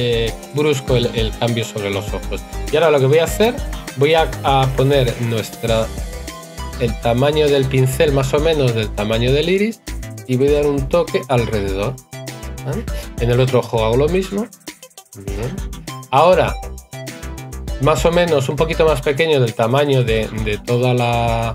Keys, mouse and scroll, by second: 5.7 right click, 15.7 right click.